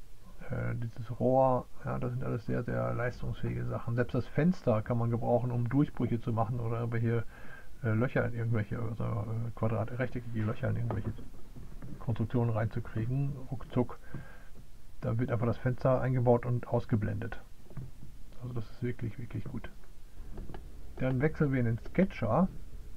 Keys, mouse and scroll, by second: 21.0 click.